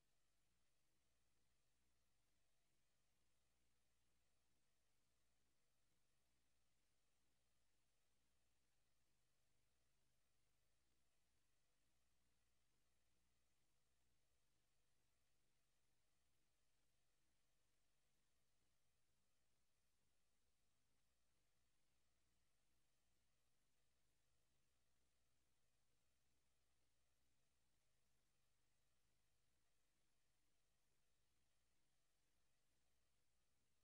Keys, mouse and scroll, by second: 0.6 right click, 2.9 click, 10.1 click, 15.3 click, 15.6 middle click, 18.0 click, 21.2 Escape, 22.8 Delete, 24.5 click, 28.9 click, 30.1 s, 31.5 click, 32.2 click, 32.4 click.